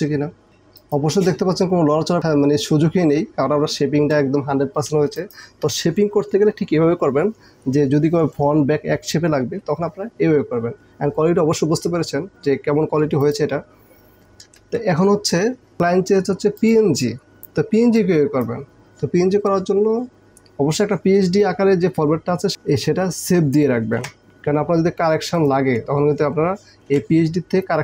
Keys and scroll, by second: 14.5 ctrl+KP_0, 24.0 ctrl+s, 26.9 ctrl+s.